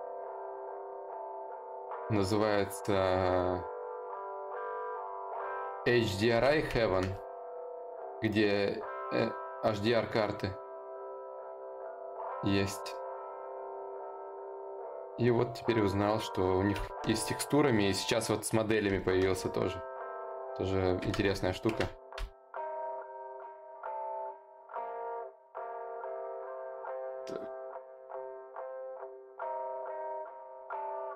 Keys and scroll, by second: 0.8 ctrl+z, 24.4 ctrl+z.